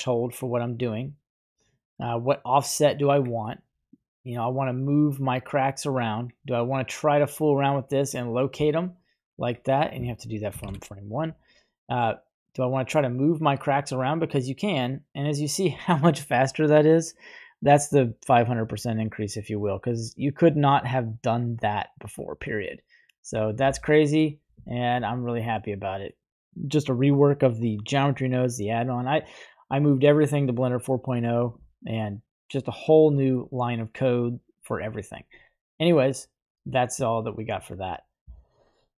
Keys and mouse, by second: 4.3-6.4 drag, 7.1-8.1 drag, 8.5-9.6 drag, 10.7 shift+Left, 12.1-23.3 drag, 23.8-24.2 middle drag, 24.7-25.0 shift+middle drag, 25.1-25.6 middle drag, 34.1-34.7 middle drag.